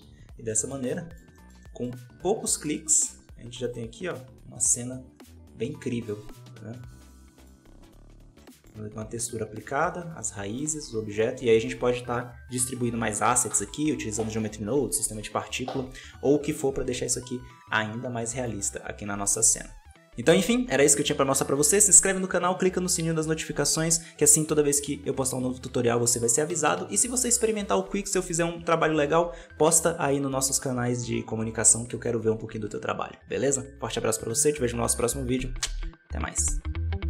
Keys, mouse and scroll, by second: 0.0 ctrl+space, 0.4-1.8 middle drag, 1.8 scroll up 3, 2.0 alt+a, 2.4 shift+middle click, 3.2 z, 5.1-7.2 middle drag, 7.3-19.8 shift+middle drag, 20.0 middle click.